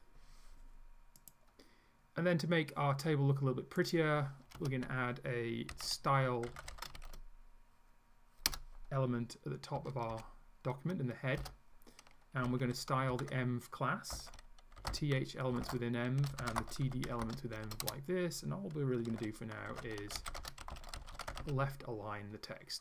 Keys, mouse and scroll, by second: 3.9 click, 4.6 Return, 5.5-7.5 typing, 8.5 Return, 9.8 Up, 10.2 End, 11.4 Return, 12.2-22.0 typing.